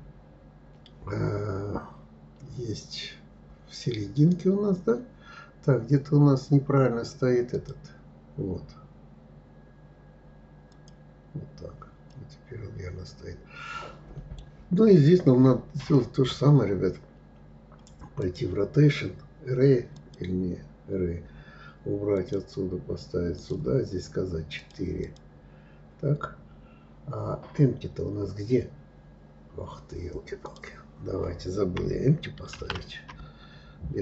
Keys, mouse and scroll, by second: 7.1 click, 10.3 click, 11.7-14.7 middle drag, 17.9-20.9 drag, 21.8 click, 23.0 click, 24.2-27.7 drag, 30.1 click, 32.2 shift+a.